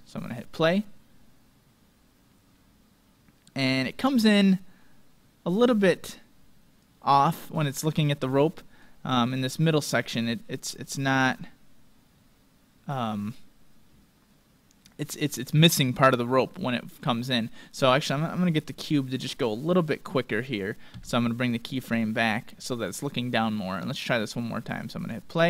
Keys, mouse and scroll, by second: 0.2-2.1 drag, 6.9-10.5 drag, 19.0-20.9 right drag, 21.0 g, 24.0-25.4 drag.